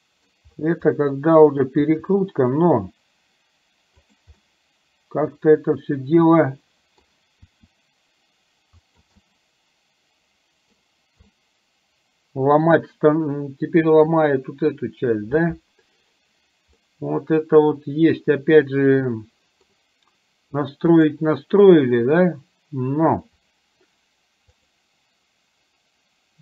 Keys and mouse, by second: 1.0 middle click, 1.9 r, 4.5-7.1 middle drag, 7.6 r, 9.2-10.9 middle drag, 11.4-14.1 middle drag, 17.0-19.7 middle drag, 21.0 click, 24.6-26.4 drag.